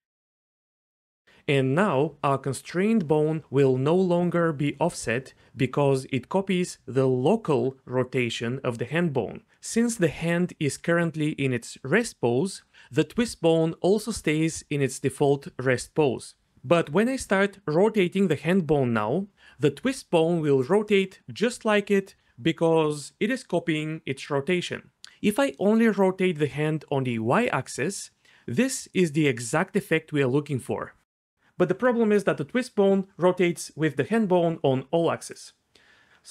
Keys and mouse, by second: 0.4-0.8 d, 0.5 click, 1.1 d, 1.3 click, 7.9 click, 8.5 click, 9.2 click, 9.8 click, 10.6 click, 11.9 click, 12.2 click, 13.0 click, 19.3 r, 23.5-23.8 right drag, 25.4 click, 30.1 shift+middle click, 31.2 click, 31.7 r, 36.1 ctrl+z.